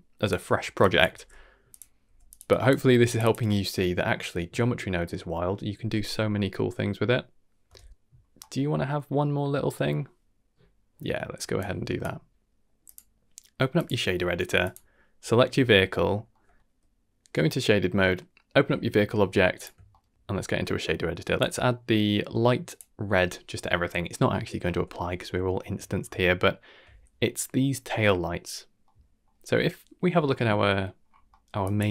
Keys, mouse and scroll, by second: 0.4 middle click, 0.8 click, 1.1 g, 2.4 g, 2.5 drag, 2.7 g, 3.2 click, 7.7 shift+space, 7.9 Tab, 8.1-8.5 scroll down 2, 8.4 middle click, 9.0 middle click, 11.6 click, 12.8-13.8 drag, 14.6 click, 15.2-15.6 scroll down 2, 15.6 z, 16.0-16.6 scroll down 3, 16.3 middle drag, 16.6 click, 19.5 click, 19.9 shift+middle click, 21.3-22.8 drag, 24.6 middle click, 25.4 shift+middle click, 25.8 scroll up 2, 26.2-26.7 shift+middle drag, 27.6-28.1 scroll up 2, 28.8-29.2 middle drag, 29.5-30.3 scroll down 1, 30.3-30.8 middle drag, 31.0-31.4 scroll up 3, 31.3 middle click, 31.6 drag.